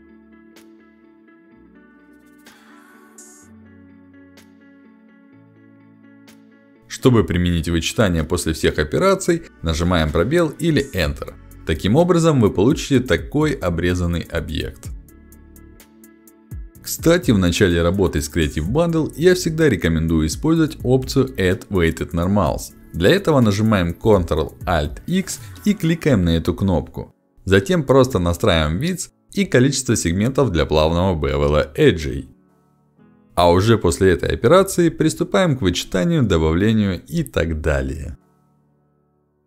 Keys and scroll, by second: 1.2 y, 6.5 y, 11.4 space, 23.8 ctrl+alt+x, 30.7 ctrl+alt+x, 37.8 ctrl+alt+x.